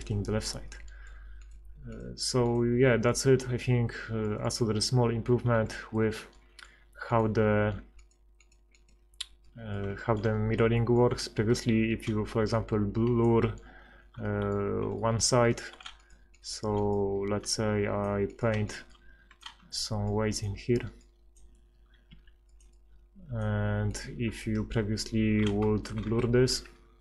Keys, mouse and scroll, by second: 0.7 click, 1.4 right click, 4.2 middle click, 5.8 middle click, 9.6 middle click, 10.6 b, 14.3 middle click, 14.7 click, 22.1 f, 25.9 ctrl+KP_Add, 26.1 ctrl+KP_Add, 26.5 ctrl+x.